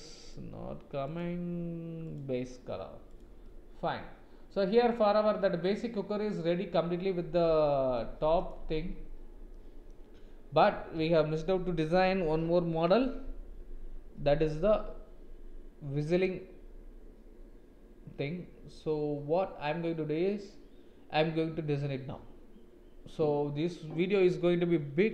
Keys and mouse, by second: 0.2 click, 1.1-3.4 drag, 3.4-8.0 middle drag, 9.5 middle click, 11.0 ctrl+s.